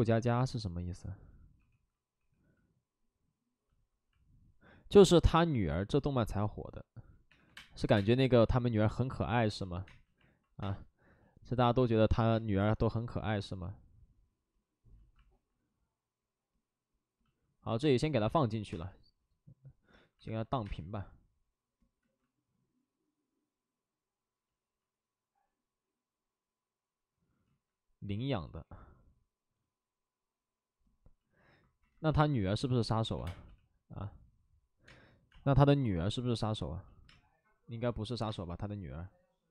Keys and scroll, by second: 1.5 2, 2.1 w, 7.2-7.8 typing, 13.2 space, 17.8 space, 18.5 space, 18.6 space, 18.6 7, 20.5 ctrl+z, 20.5 space, 21.9 ctrl+z, 24.5 ctrl+z, 26.3 ctrl+z, 27.4 ctrl+z, 33.1 3, 33.1 space, 33.4 3, 35.2 space, 39.1 space.